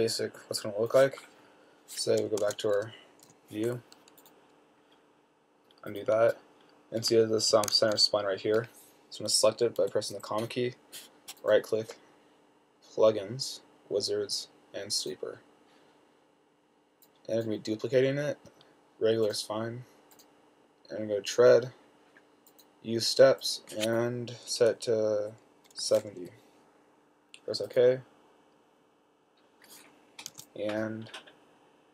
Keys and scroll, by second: 2.7-4.0 typing, 10.1 ,, 26.1 typing, 30.6 t.